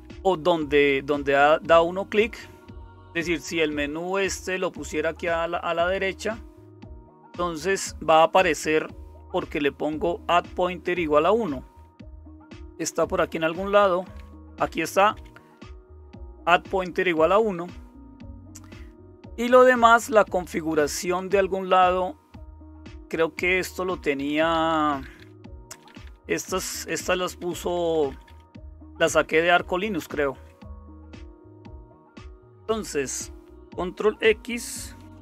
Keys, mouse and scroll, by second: 0.1 Down, 12.0 Down, 12.2 Down, 12.3 Down, 12.5 Down, 12.7 Down, 12.8 Down, 13.0 Down, 13.2 Down, 13.3 Down, 13.5 Down, 13.6 Down, 13.8 Down, 14.2 Down, 14.3 Down, 14.6 Up, 14.8 Up, 15.0 Up, 15.1 Up, 15.7 Up, 15.7 Right, 16.4-18.0 Right, 18.2 Down, 19.0 Down, 19.2-26.9 Down, 27.0 Up, 27.2 Up, 27.4 Up, 27.6 Up, 27.7-28.9 Up, 28.9 Page_Up, 29.1 Page_Up, 29.3 Page_Up, 29.5 Page_Up, 29.6 Page_Up, 29.8 Page_Up, 31.3 Page_Up, 31.5 Down, 35.0 ctrl+x.